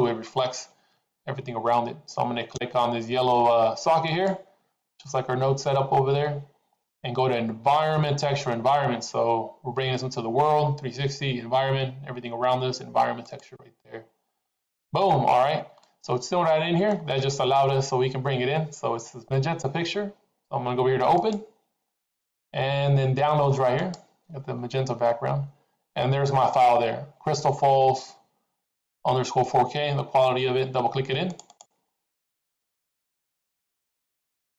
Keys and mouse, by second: 4.0-14.2 drag, 15.8-16.9 middle drag, 21.0 click.